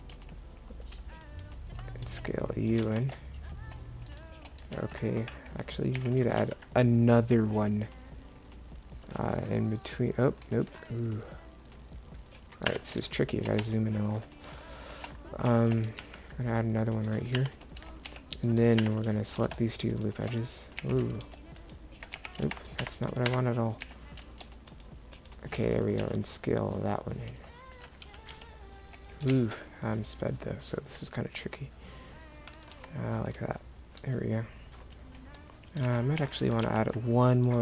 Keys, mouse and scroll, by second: 0.2 a, 2.1 s, 4.8 ctrl+z, 6.0 a, 6.4 ctrl+r, 16.1 ctrl+r, 17.8 a, 18.1 c, 20.9 a, 22.2 alt+a, 22.9 Escape, 23.3 Escape, 23.9 a, 26.1 s, 32.8 Tab, 35.9 Tab, 36.2 a, 36.7 ctrl+r.